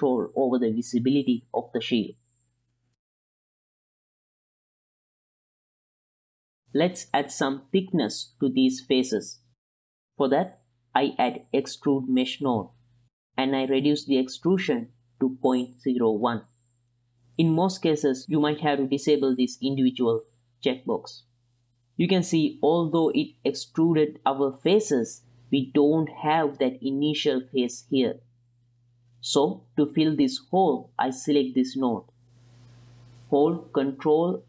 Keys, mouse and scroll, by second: 3.1 middle click, 3.4 click, 3.6 click, 4.0 click, 4.2 click, 4.7 click, 5.0 click, 5.2 shift+p, 5.4 F2, 6.2 n, 6.4 click, 6.5 n, 6.6 middle click, 8.4 middle click, 9.0 shift+middle drag, 9.5 middle click, 10.1 middle click, 10.6 click, 10.8 shift+a, 14.8 click, 15.8 middle click, 16.5 shift+middle click, 16.6 shift+click, 17.2-17.7 scroll down 2, 17.5 shift+middle click, 17.9 ctrl+shift+click, 19.6 click, 21.8 click, 24.5 click, 28.2 click, 28.8-29.9 drag, 30.2-30.8 drag, 31.1 click, 33.4-34.4 ctrl+shift+drag.